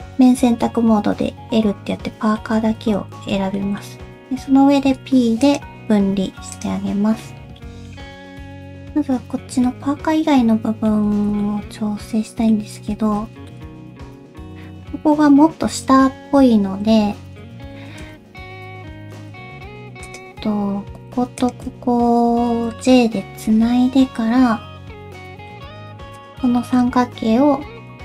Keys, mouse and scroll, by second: 0.6 middle click, 2.8 alt+z, 3.2 alt+z, 3.6 middle click, 4.8 p, 6.1 Tab, 6.5 click, 7.0 scroll down 1, 7.2 middle click, 8.0-8.4 scroll down 3, 8.4 alt+z, 8.4 middle click, 8.9 scroll up 1, 9.2 Tab, 9.7 middle click, 11.1 alt+z, 11.4 middle click, 12.8 alt+z, 13.2 alt+z, 13.5 shift+middle click, 13.8 Tab, 14.1 2, 16.4 1, 17.7 shift+2, 18.8 scroll up 1, 19.0 Tab, 19.5 alt+z, 20.1 click, 20.4-20.8 scroll up 1, 21.0 alt+z, 21.1 Tab, 21.4 shift+click, 21.7 alt+z, 22.3 alt+z, 22.8 middle click, 23.5 j, 25.0 /, 25.3 middle click, 25.9 3, 26.2 click, 26.6 shift+middle click, 26.8 /, 27.1 x.